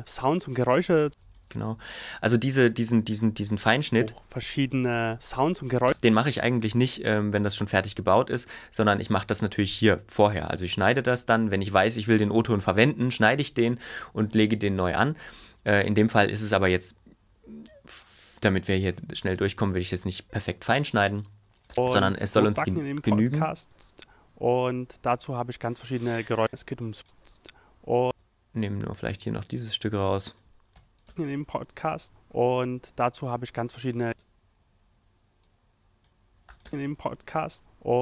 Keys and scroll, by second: 1.0 space, 3.5 f, 3.9 space, 5.8 space, 16.4 ⟲, 21.7 space, 28.0 space, 30.8 x, 31.0 space, 34.1 space, 36.5 f, 36.6 space.